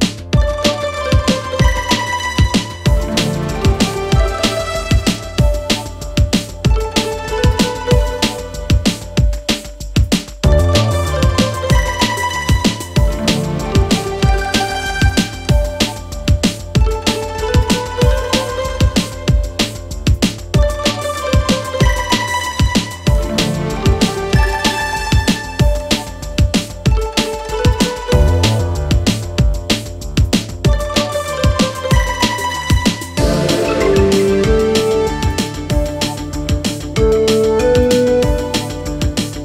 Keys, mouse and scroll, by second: 2.2 space, 2.3 click, 2.5 space, 4.7 click, 6.6 ctrl+-, 7.0 ctrl+0, 12.3-13.0 typing, 14.5-17.3 typing, 15.4 ctrl+shift+click, 24.1 click.